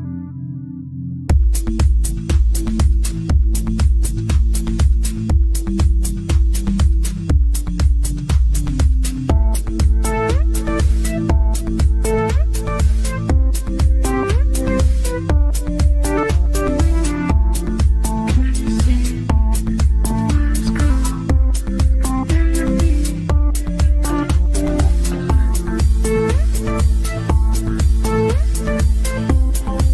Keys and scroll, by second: 4.2 KP_Add.